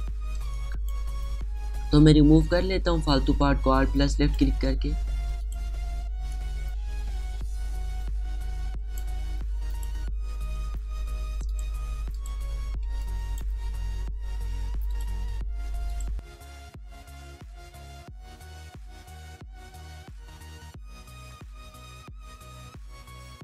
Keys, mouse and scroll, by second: 0.3-0.8 alt+scroll up 1, 1.1 space, 1.2-6.1 drag, 7.0-9.6 alt+drag, 10.6 alt+click, 11.4 space, 11.5 click, 11.8 space, 12.6 alt+click, 13.2 alt+click, 13.6 space, 13.6 click, 14.5 alt+click, 15.2-16.4 alt+drag, 16.4 space, 16.6 click, 17.2 alt+click, 18.0 alt+click, 18.8-20.8 alt+drag, 21.1 space, 21.2 click, 21.3 space, 21.9 click, 22.9 space, 23.0 click.